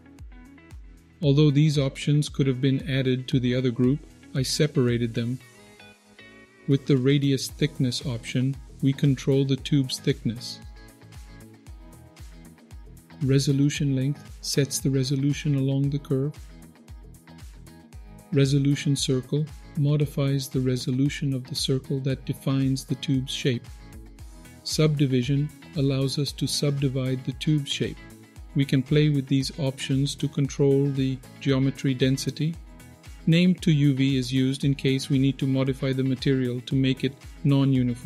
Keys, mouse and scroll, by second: 2.4 click, 6.8-11.5 shift+drag, 12.2 ctrl+z, 12.8-14.7 drag, 14.9 ctrl+z, 15.7-17.6 shift+drag, 17.8 ctrl+z, 18.6-24.4 drag, 26.2 click, 29.8 click.